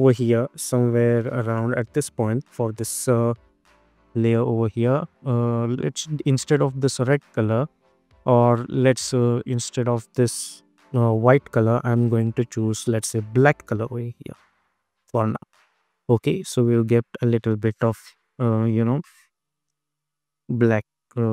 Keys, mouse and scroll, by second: 3.7 space, 4.7 click, 5.7 space, 8.8 click, 10.6 space, 12.2 click, 13.4 Return, 13.9 space, 18.1 space, 18.4 click, 19.0 space.